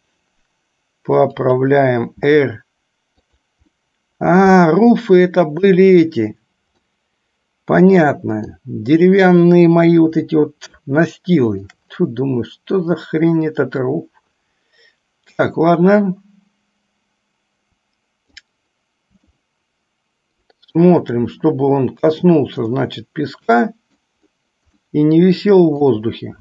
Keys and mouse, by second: 0.0 g, 2.4 r, 3.9-6.2 middle drag, 7.3-9.0 middle drag, 11.3 shift+middle click, 13.9 click, 14.3-18.8 drag, 19.7-21.0 shift+middle drag, 23.1-24.3 middle drag, 25.2 middle click.